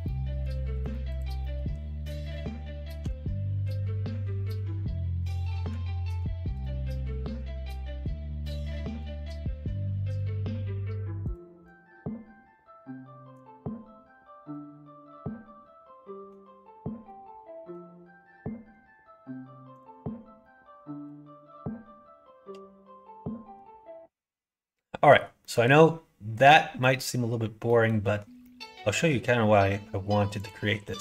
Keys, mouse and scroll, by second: 0.0 middle click, 0.7 middle click, 1.3 middle click, 2.9 g, 7.1 middle click, 7.9 middle click, 10.0 click, 11.2 click, 11.7-13.3 drag, 14.5-16.2 middle drag, 17.0 middle click, 19.6 click, 20.3 middle click, 23.1 middle click, 25.3 middle click, 26.8 middle click, 27.6 middle click, 28.3 middle click.